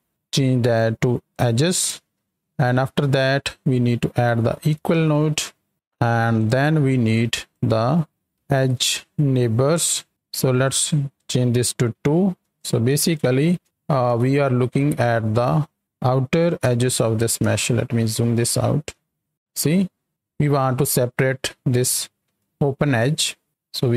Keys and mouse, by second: 0.5-1.4 drag, 2.5-3.1 drag, 6.4 click, 7.1-7.5 drag, 10.6 click, 11.1 click, 12.5 ctrl+shift+click, 13.1 ctrl+shift+click, 14.0 alt+a, 14.3-15.2 middle drag, 16.6 KP_7, 17.5 shift+middle click, 19.0 shift+click, 22.4-22.8 shift+middle drag.